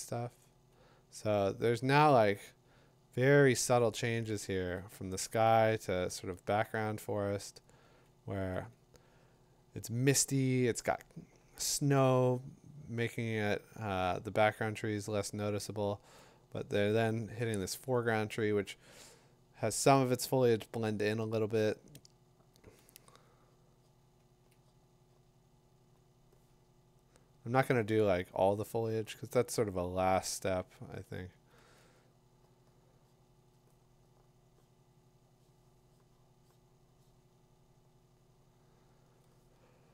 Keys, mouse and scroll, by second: 1.3 click, 4.7 click, 6.3 click, 7.4 click, 8.5 click, 13.7 click, 14.1 click, 16.1 click, 18.0 click, 19.9 click, 22.7 click, 24.5 click, 27.4 click, 30.5 click, 31.1 click, 39.1 click.